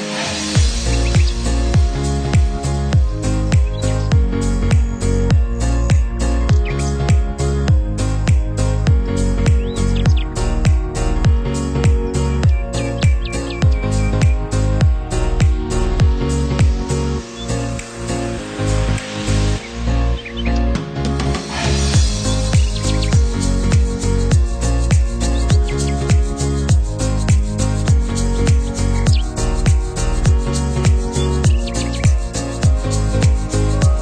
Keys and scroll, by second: 23.4 Caps_Lock, 24.4 k, 24.7 i, 25.6 n, 25.7 g, 27.0 Caps_Lock, 30.9 space, 31.5 space, 31.7 Right, 31.9 space.